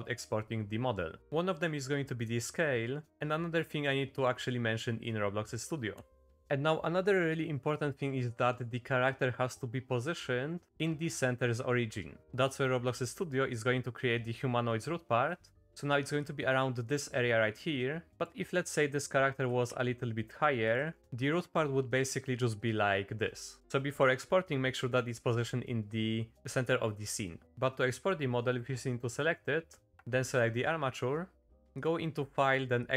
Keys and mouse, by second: 0.5 shift+middle drag, 6.4 Tab, 8.1-8.4 middle drag, 9.7-10.1 middle drag, 10.8 middle click, 16.2-18.2 drag, 19.4 g, 21.0-23.6 drag, 23.6 ctrl+z, 31.9-32.9 drag.